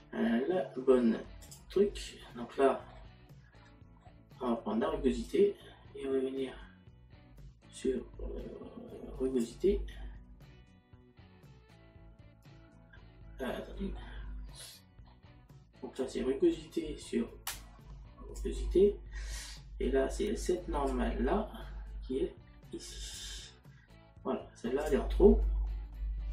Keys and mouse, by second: 3.7 middle click, 5.3 click, 13.5 middle click, 20.9 click.